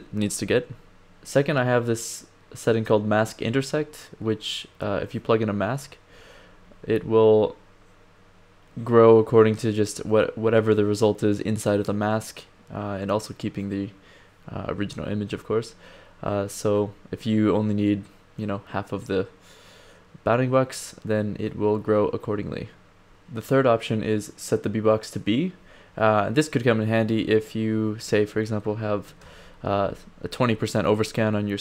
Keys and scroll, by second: 27.2 1, 27.9 d, 29.2 1.